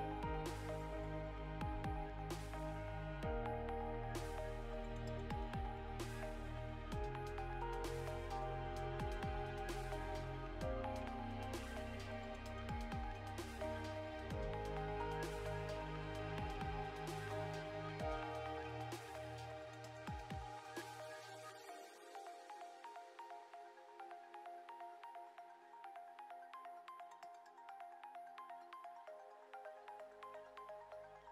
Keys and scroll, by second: 0.9 Return, 10.1 Return, 22.4 BackSpace, 26.1 Return, 26.8 Down, 29.7 Down, 31.0 Return.